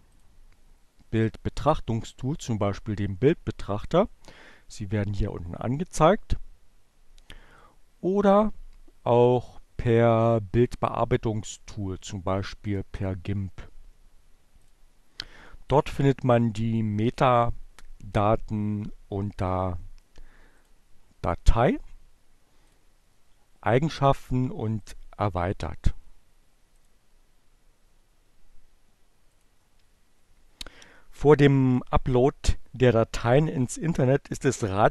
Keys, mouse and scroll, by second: 7.4 click, 9.0 click, 14.3 click, 20.4 click, 22.2 middle click, 22.3 click, 23.7 click, 25.1-26.7 drag, 28.1-29.2 drag.